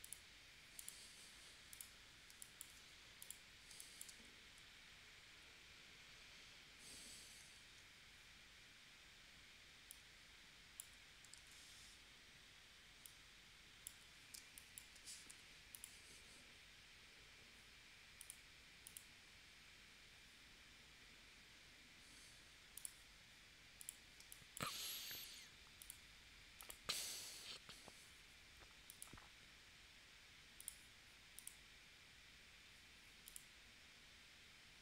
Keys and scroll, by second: 2.3 space, 3.7 space, 11.4 super+z, 14.4 space, 15.3 v, 24.2 space.